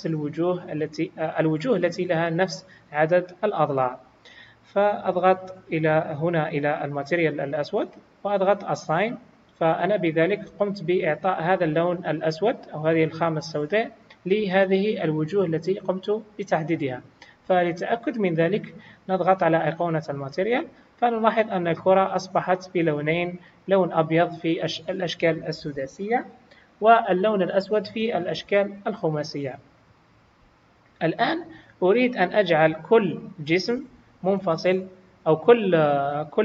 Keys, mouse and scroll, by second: 5.9 click, 8.8 click, 20.0 click, 32.5 click, 34.1 g, 36.2-36.4 scroll up 1.